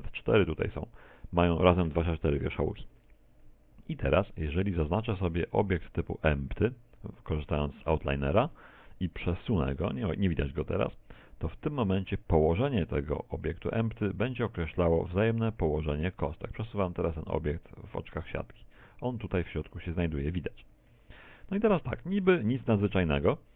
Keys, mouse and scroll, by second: 6.0 click, 7.4 click, 11.9 click, 18.8 z, 21.0 z, 21.7 shift+middle click, 22.7 middle click.